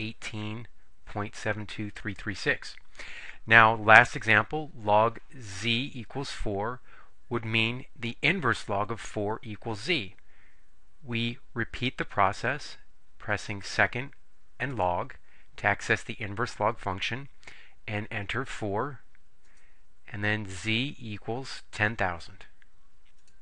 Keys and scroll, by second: 18.6 4, 19.6 Return.